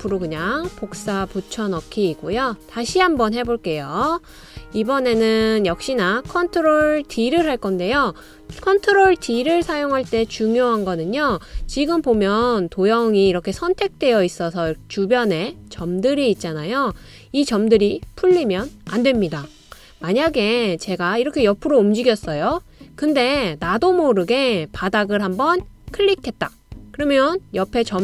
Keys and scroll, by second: 7.5 super+d.